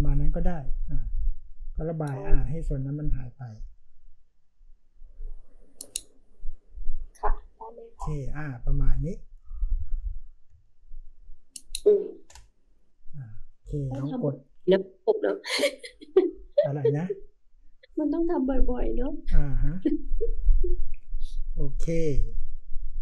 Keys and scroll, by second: 10.4 space.